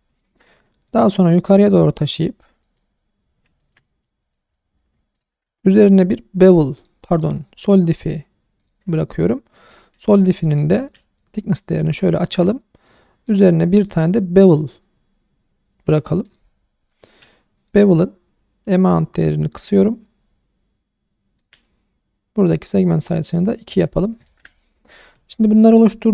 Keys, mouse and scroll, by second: 0.2 shift+middle click, 0.9 click, 2.6 middle click, 2.9-3.6 scroll up 4, 3.6 middle click, 4.2 scroll down 2, 4.5 middle click, 5.4 Tab, 6.7 click, 7.1-8.7 drag, 9.0 middle drag, 9.6-9.9 scroll up 3, 10.0 shift+middle drag, 11.2-12.4 shift+drag, 13.2 click, 13.8-16.3 drag, 17.7-21.4 shift+drag, 22.5 click, 23.7-24.2 scroll down 2, 24.2-24.7 alt+middle drag, 25.0-25.3 scroll down 1, 25.3 shift+middle click.